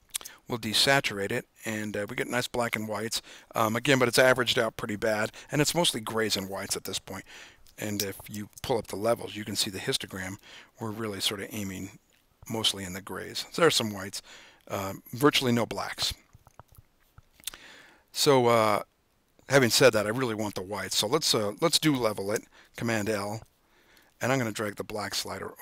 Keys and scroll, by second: 8.5 super+l, 22.1 super+l.